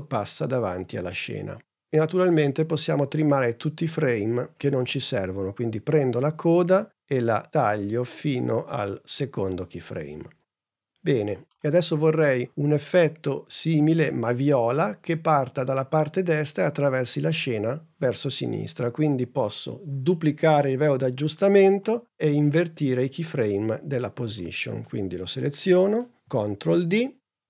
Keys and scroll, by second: 26.2 super+d.